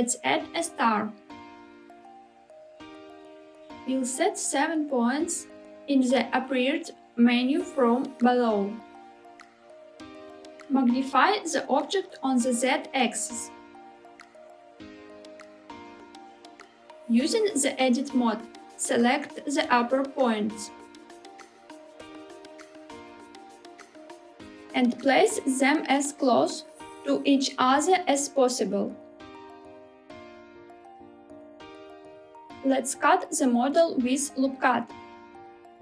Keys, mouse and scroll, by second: 3.5 middle click, 3.8 click, 6.8-10.2 drag, 10.5 middle click, 10.7 s, 11.8 z, 15.2 click, 16.3 KP_1, 17.0 Tab, 18.8 alt+z, 20.7 1, 22.4 click, 24.9 s, 31.2 click, 33.4 ctrl+r.